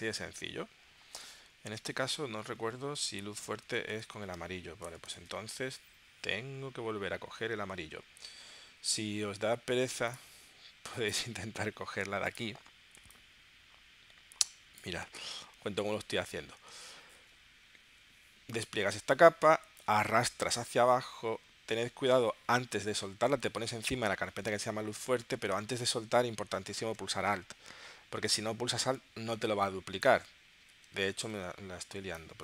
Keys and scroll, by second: 1.3 super+Tab, 3.0 space, 3.6 space, 5.2 super+Tab, 15.7 super+z.